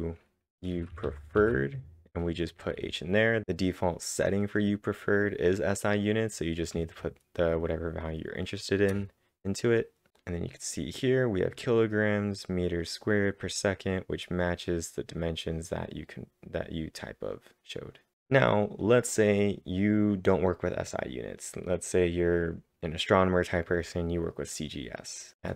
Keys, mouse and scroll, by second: 0.0-1.2 typing, 1.3 ctrl+`, 6.5-7.2 typing, 8.9 Return, 10.5-12.1 drag, 12.1 click, 12.8 click, 13.4 click, 14.4 click, 15.2-18.1 drag, 25.3-25.5 typing.